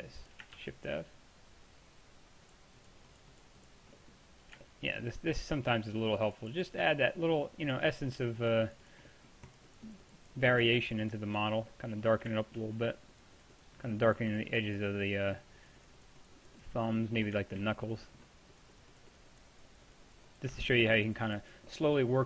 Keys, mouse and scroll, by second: 0.6 shift+f, 6.9-9.3 drag, 9.3-11.6 middle drag, 11.6 click, 11.8 middle drag, 12.0 click, 15.2-16.9 drag, 18.6-21.0 drag, 21.9 click, 22.1 drag.